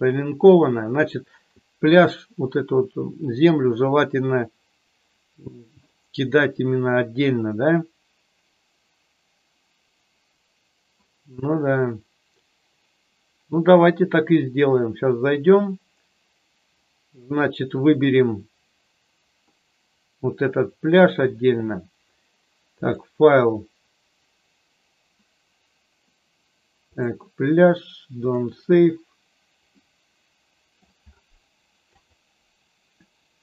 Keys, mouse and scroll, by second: 22.7-28.7 drag, 29.7-30.8 middle drag, 31.8 click.